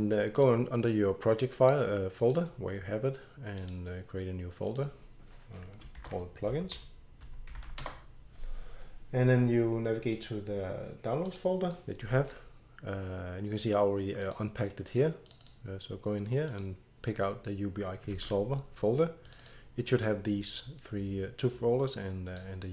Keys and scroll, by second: 5.7-8.2 typing, 10.1 typing, 12.6-13.3 typing, 18.1 ctrl+c.